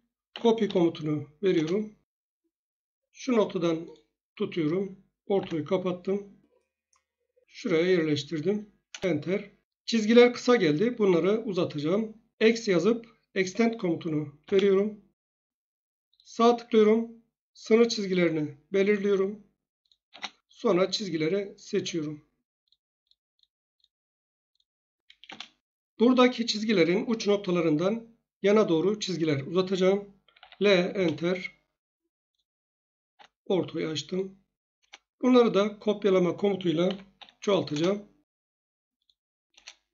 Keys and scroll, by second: 0.3-0.6 typing, 1.5 Return, 5.3 F8, 8.9 Return, 12.4 typing, 15.1 Return, 20.0 space, 25.2 Return, 30.4 1, 30.9 Return, 33.1 F8, 34.8 Return, 36.9 typing, 37.7 Return, 39.5 Return.